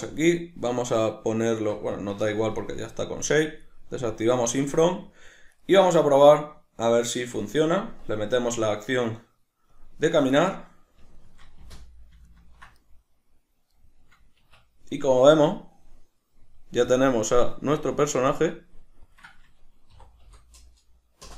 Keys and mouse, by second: 2.1 Escape, 2.6-4.0 middle drag, 4.0 click, 4.7-5.5 middle drag, 5.5 right click, 5.6-8.0 middle drag, 8.0-10.4 drag, 10.4-12.1 middle drag, 11.6 space, 14.4 Escape.